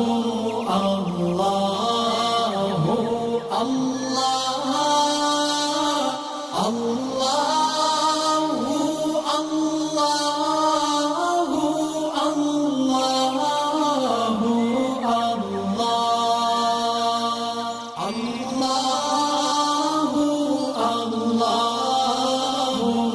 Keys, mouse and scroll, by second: 0.0 alt+Num_Lock, 0.0 click, 0.1-1.6 alt+scroll up 4, 1.6-3.4 drag, 3.6 click, 3.9-5.2 alt+scroll down 2, 5.2 click, 5.3-7.9 drag, 8.5 scroll up 2, 9.7 click, 12.7 alt+scroll down 1, 13.1 alt+click, 13.4 right click, 14.4 click, 16.9 alt+scroll up 1, 17.4-19.5 drag, 19.9 alt+scroll up 1, 21.3 click, 21.5 space, 21.7 click, 21.9 space, 22.1-23.1 drag.